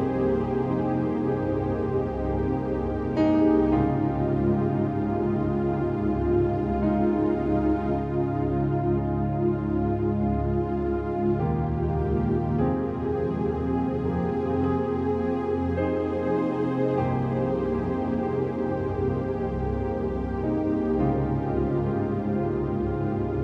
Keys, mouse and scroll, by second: 1.6 click, 2.6 click, 3.4 ctrl+shift+i, 4.4 ctrl+d, 4.8 scroll up 1, 5.0 v, 6.0 ctrl+click, 6.7 x, 7.4-7.8 scroll up 1, 9.4 click, 10.3 ctrl+d, 10.6-11.0 scroll down 1, 11.2 ctrl+t, 11.5-18.3 drag, 18.3 Return, 19.5 click, 22.7 click, 23.2 Return.